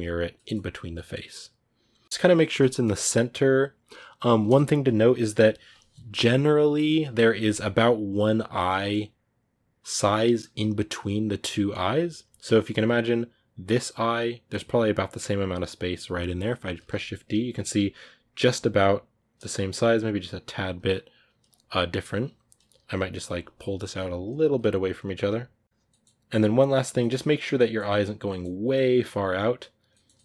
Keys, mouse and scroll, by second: 2.0-2.6 scroll down 1, 2.6-4.3 scroll down 1, 4.3-5.9 scroll down 1, 5.9-8.6 scroll down 1, 8.6-9.9 scroll down 1, 9.9-10.6 scroll down 1, 10.6-13.3 scroll down 1, 13.3-14.6 scroll down 1, 14.6-15.3 scroll down 1, 15.3-15.9 scroll down 1, 15.9-17.9 scroll down 1, 17.9-21.2 scroll down 1, 21.2-23.9 scroll down 1.